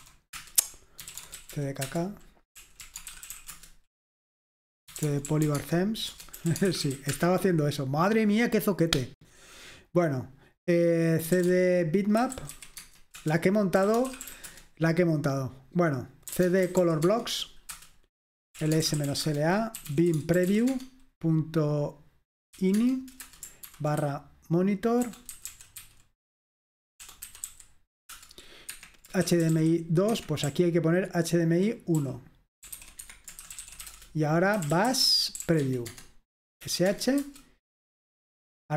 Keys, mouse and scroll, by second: 0.0-7.5 typing, 6.1 Return, 11.2-14.8 typing, 13.2 Return, 16.2-17.4 typing, 17.8 Return, 18.4-21.0 typing, 22.6-28.0 typing, 28.2 Return, 28.7 Escape, 29.1-36.7 typing, 30.1 Escape, 37.0 Tab, 37.3 Return.